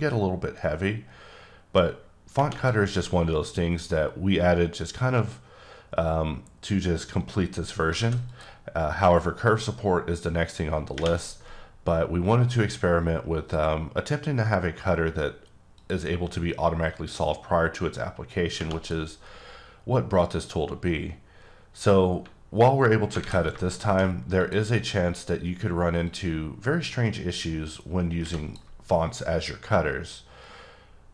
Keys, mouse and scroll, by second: 0.5 click, 7.9 alt+Num_Lock, 8.0 alt+a, 8.3 click, 9.5 click, 15.7 click, 16.5 click, 22.5 alt+Num_Lock, 23.2 alt+a, 23.7 shift+middle click, 24.4 click, 26.1 click.